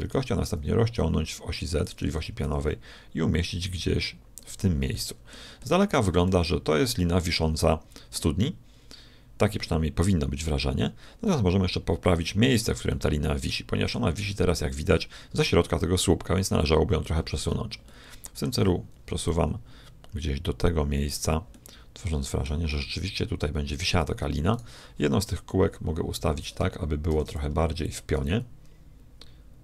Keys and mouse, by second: 0.1 s, 2.3 g, 4.9-11.1 middle drag, 11.2-16.5 middle drag, 17.3-18.4 middle drag, 19.2-21.1 drag, 21.5-23.5 middle drag, 24.5-25.6 right drag, 25.4 KP_1, 27.0 shift+d, 28.1 r.